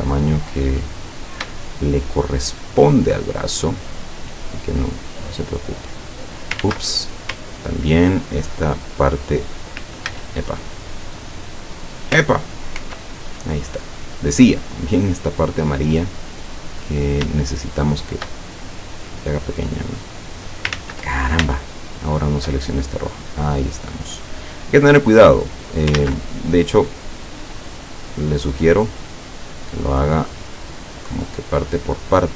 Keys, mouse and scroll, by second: 1.7 shift+click, 5.4-6.7 drag, 6.7 ctrl+z, 8.4 ctrl+click, 10.2 ctrl+z, 12.9 ctrl+y, 14.2-16.8 drag, 17.5 shift+click, 19.0-20.8 drag, 20.8 ctrl+z, 21.8 shift+click, 23.1-26.0 drag, 26.0 ctrl+z, 27.3-30.2 drag, 31.1-32.3 drag.